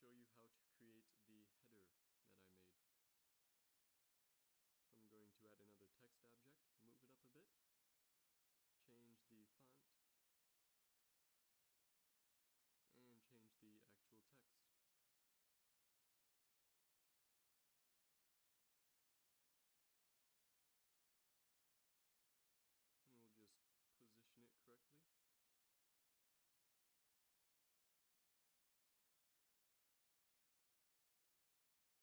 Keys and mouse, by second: 0.9 shift+s, 3.6 shift+a, 5.8 g, 8.7-9.3 drag, 12.0 Tab, 12.5 ctrl+a, 15.9-18.4 typing, 19.7-20.7 typing, 21.4 Tab, 24.9 g, 25.5-26.9 middle drag, 28.2 g, 29.9 a, 31.3 shift+a.